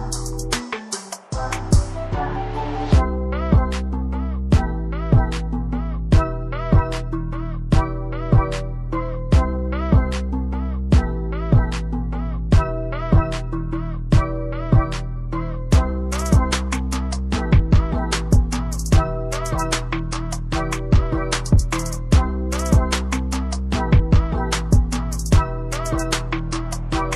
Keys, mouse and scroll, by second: 6.0 click, 10.2 Delete, 10.6 shift+scroll up 1, 11.7-12.0 shift+scroll down 1, 13.2-13.5 scroll down 1, 13.6 shift+scroll up 1, 14.4-15.3 shift+scroll up 1, 15.5 shift+scroll up 1, 16.6 click.